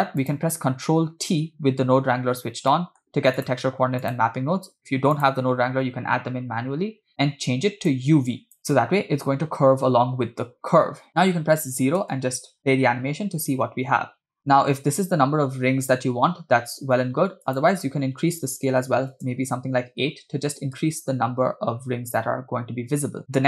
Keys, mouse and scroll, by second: 0.2 click, 1.6 ctrl+t, 2.8 middle click, 3.5 drag, 4.1 click, 5.2 click, 7.9-8.6 drag, 11.3 KP_0, 12.3 space, 17.1 space, 17.6-19.3 drag, 20.9 space, 23.2 space.